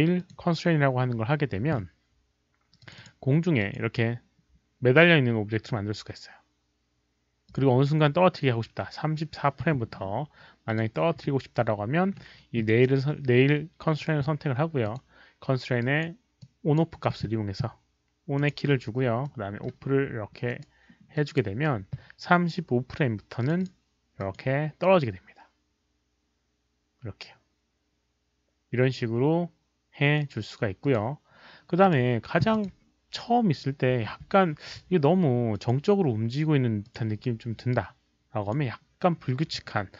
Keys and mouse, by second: 0.1 click, 2.8 click, 3.6 click, 7.4 click, 10.6 click, 14.8 click, 15.7 right click, 16.3 click, 18.3 right click, 18.3 click, 19.2 middle click, 19.2 click, 19.2 right click, 20.4 right click, 20.4 middle click, 20.4 click, 21.1 click, 23.4 click, 23.5 click, 24.1 click, 29.1 click, 29.1 right click, 29.1 middle click, 30.8-31.2 drag, 30.9 right click, 31.8 click, 32.5 click, 34.1 click, 35.5 click, 36.8 click, 38.4 click.